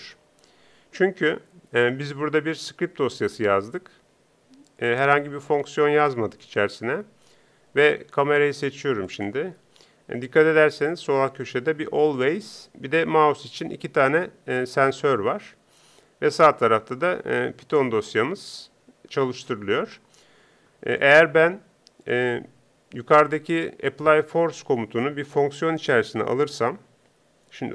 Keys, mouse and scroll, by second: 9.2-19.8 drag.